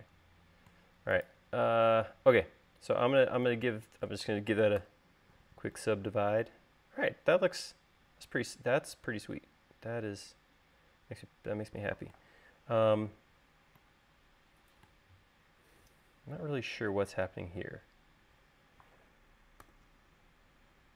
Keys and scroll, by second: 5.7 u, 20.6 u.